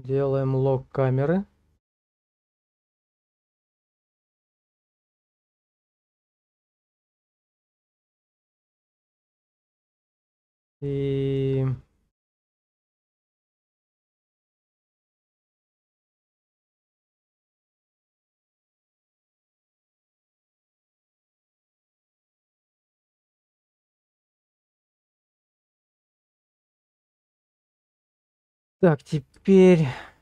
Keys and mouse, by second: 3.6 click, 4.3 middle click, 5.5 shift+middle click, 5.9-8.3 middle drag, 8.7 middle click, 9.6 shift+middle click, 10.0 middle click, 10.8 shift+click, 11.9-13.7 middle drag, 14.2 shift+middle click, 15.0 middle click, 15.6 shift+middle click, 16.6-18.2 middle drag, 18.6 shift+middle click, 18.9-20.2 middle drag, 20.7 shift+middle click, 21.7 shift+middle click, 22.1 middle click, 22.7 shift+middle click, 23.6 shift+middle click, 27.4 click, 28.4 shift+middle click, 28.9 middle click, 29.5 shift+middle click.